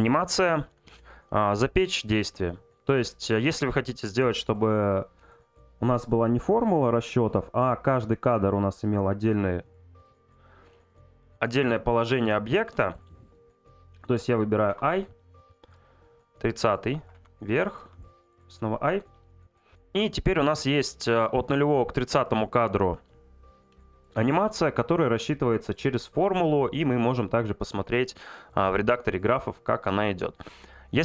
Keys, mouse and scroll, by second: 2.2 click, 3.7-5.2 drag, 15.7 click.